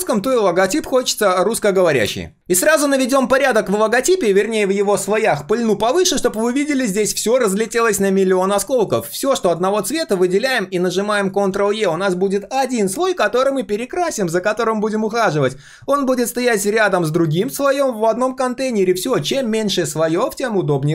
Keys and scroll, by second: 4.7 ctrl+shift+], 11.6 ctrl+e.